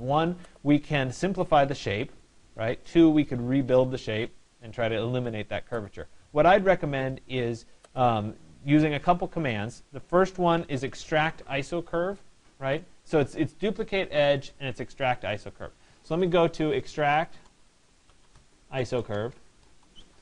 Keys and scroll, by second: 16.6 e.